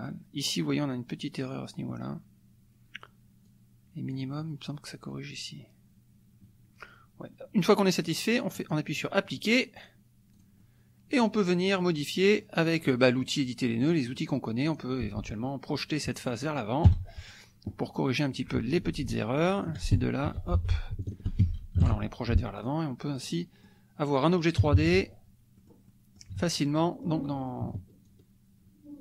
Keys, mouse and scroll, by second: 3.5 click, 8.6 click, 9.8 click, 10.3 click, 10.6-11.9 middle drag, 12.3 click, 13.9 click, 14.8 click, 16.1 click, 16.8 Page_Up, 17.9 click, 18.8 F2, 19.1 middle click, 19.6 shift+click, 19.9 shift+F1, 20.6 F2, 21.1 shift+click, 21.4 shift+F1, 21.8 shift+Page_Up, 22.3 shift+F1, 22.6 shift+click, 22.9 shift+middle click, 23.1 shift+click, 24.6 KP_Subtract, 25.6 click, 26.3 ctrl+a, 26.8 ctrl+click, 28.1-29.0 ctrl+shift+drag.